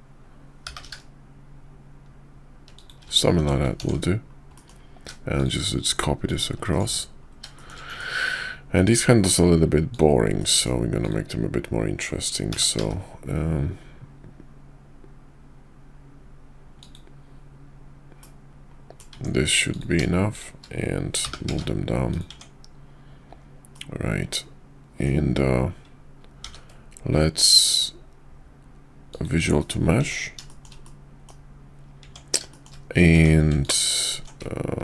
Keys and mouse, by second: 0.6 g, 3.3 Tab, 3.8 alt+x, 4.5 middle click, 5.4-6.3 shift+drag, 7.6 shift+middle click, 7.9 KP_5, 9.0-9.3 middle drag, 9.9 click, 10.4 middle click, 11.0 click, 12.5 g, 18.2-19.0 middle drag, 19.1 Tab, 19.7 click, 20.3 shift+click, 21.2 g, 22.3 Tab, 23.7-25.0 middle drag, 26.4 ctrl+a, 29.6 middle click, 30.0 Tab, 30.5 shift+middle click, 30.8 middle click, 32.5 shift+middle click, 33.6 alt+click.